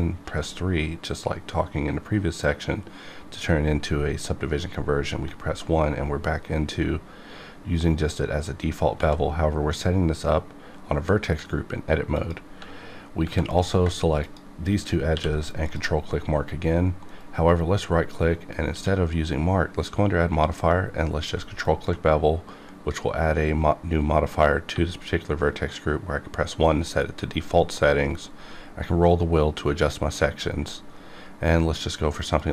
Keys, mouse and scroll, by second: 0.2 3, 5.1 1, 6.0-6.5 scroll up 2, 9.0 z, 12.1 click, 12.4 Tab, 13.5 click, 14.2 shift+click, 15.1 q, 15.6 ctrl+click, 17.1 right click, 18.7 q, 21.3 q, 21.6 ctrl+click, 22.6-23.3 scroll up 1, 24.7 1, 28.3-28.7 scroll down 2, 29.7-30.1 scroll up 1, 30.1-30.7 scroll down 1, 32.3 click.